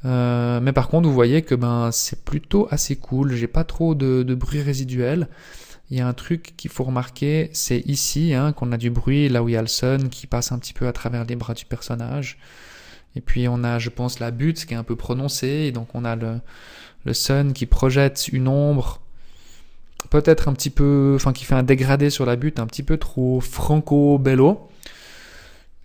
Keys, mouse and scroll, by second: 23.3 click, 24.2 scroll down 2, 25.3 click.